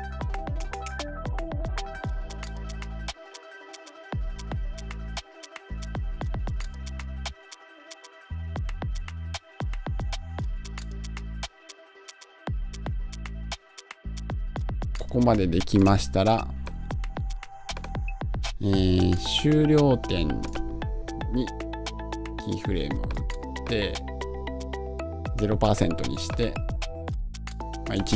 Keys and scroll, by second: 1.5 Home.